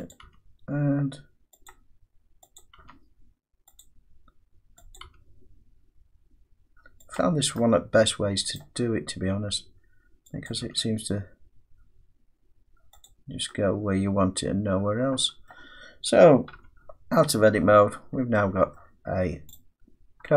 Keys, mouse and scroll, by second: 0.1 click, 0.3 g, 1.7 click, 2.6 click, 2.8 g, 3.8 click, 5.0 click, 5.1 g, 7.2 click, 8.6 middle click, 10.5 click, 10.7 g, 13.1 click, 15.5 middle click, 16.2-16.6 scroll down 1, 16.6 Tab, 16.6-17.2 scroll up 6, 17.2 scroll down 1, 18.0-18.8 scroll down 6, 18.8 middle click, 19.6 click.